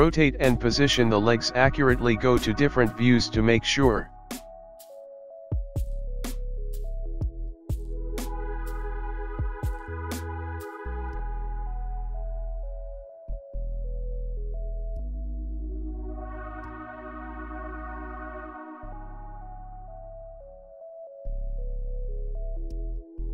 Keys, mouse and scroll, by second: 0.1 click, 0.1 g, 4.1 KP_3, 17.0 middle click, 18.4 KP_1, 22.1 g, 22.1 KP_3.